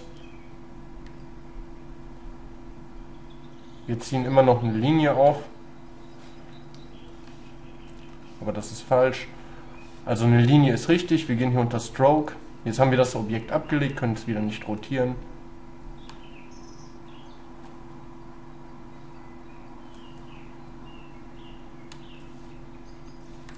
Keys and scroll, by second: 6.9 ctrl+z, 8.1 ctrl+y.